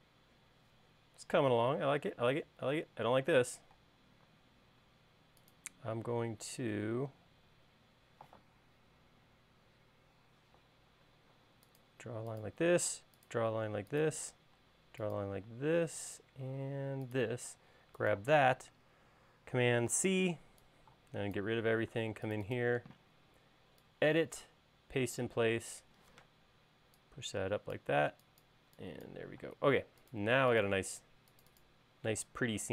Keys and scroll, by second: 4.5-5.6 typing, 9.6 Page_Down, 10.1 Page_Down, 13.4 l, 15.0-15.3 typing, 18.3 space, 20.6 super+c, 21.0 e, 22.7 space, 26.8 p, 28.6 e, 30.2 space.